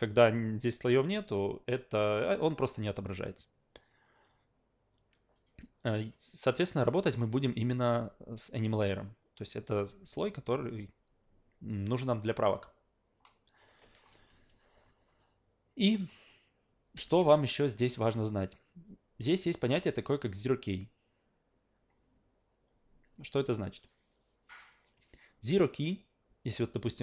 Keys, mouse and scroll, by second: 5.3 click, 6.0 click, 7.0 click, 14.0 alt+middle click, 14.8 alt+middle click.